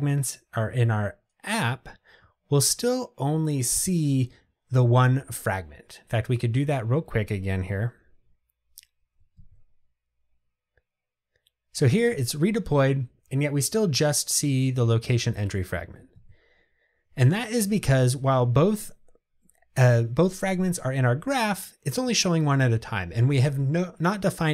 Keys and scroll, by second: 6.4 ctrl+r.